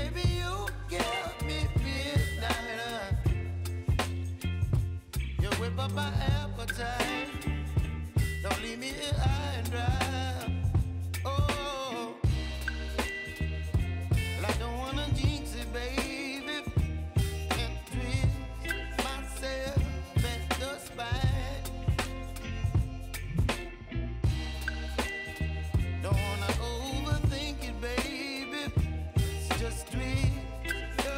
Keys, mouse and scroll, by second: 3.9 Return, 5.4-9.2 drag, 11.5 ctrl+alt+Home, 13.4-25.1 drag, 25.1 s, 25.6 click, 28.8 click, 30.2 ctrl+d, 30.7 s.